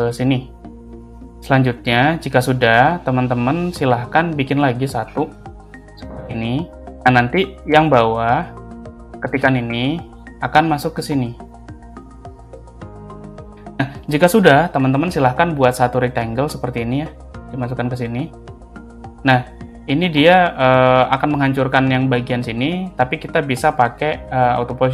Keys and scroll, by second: 1.6 space, 5.1 ctrl+c.